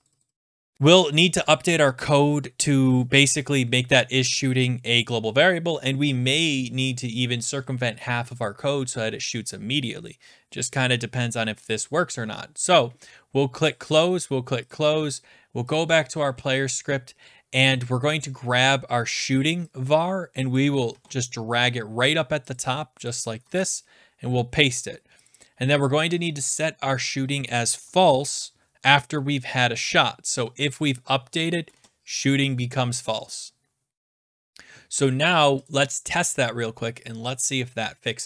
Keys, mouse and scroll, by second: 0.4 click, 13.8 click, 14.7 click, 17.6 click, 17.6 scroll down 3, 20.5 click, 20.7 scroll, 20.9 ctrl+x, 21.4-22.4 scroll, 22.5 click, 23.0 click, 23.1-23.4 scroll down 6, 23.4 ctrl+v, 25.3 click, 25.4 click, 27.7 click, 28.0 ctrl+c, 28.4-29.1 scroll down 9, 30.9 click, 31.5 Return, 31.7 ctrl+v, 32.8 scroll down 3, 35.7 click, 36.7 middle click, 37.5 click.